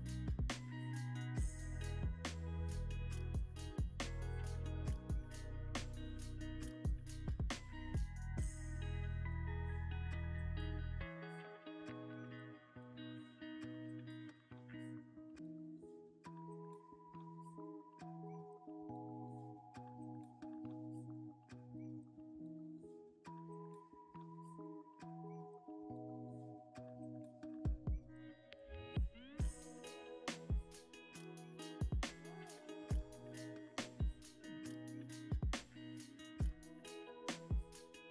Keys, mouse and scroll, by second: 0.0 y, 1.5 z, 5.2 y, 6.7 g, 6.8 z, 7.0 x, 8.6 g, 8.9 y, 13.8-15.1 shift+drag, 15.1 g, 15.4 y, 17.6 r, 17.9 x, 21.2 g, 21.3 z, 23.3 ctrl+z, 25.6 Delete, 27.2 middle click, 27.2 Delete, 29.1 shift+click, 30.2 shift+click, 31.6-38.1 shift+drag, 36.4 scroll down 1.